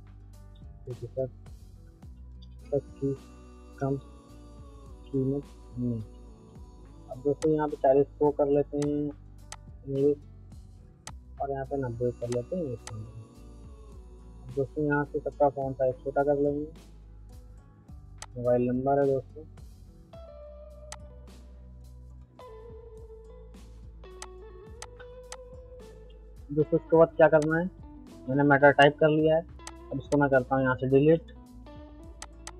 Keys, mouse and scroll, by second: 0.4-6.3 typing, 1.7 Return, 7.4-12.3 drag, 14.6 ctrl+a, 17.0-18.2 middle drag, 18.2 click, 20.3 middle click, 20.9 click, 21.4 middle click, 24.2 click, 25.0 c, 25.3 click, 26.1 F3, 26.9 middle click, 27.4 click, 28.2 c, 28.8-32.5 drag.